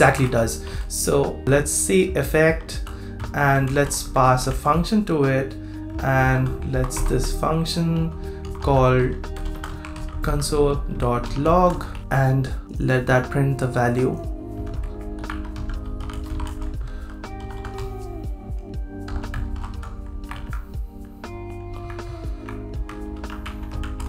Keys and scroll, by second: 0.0 super+Right, 1.4 super+v, 13.0 super+c, 20.3 super+v, 23.1 super+v.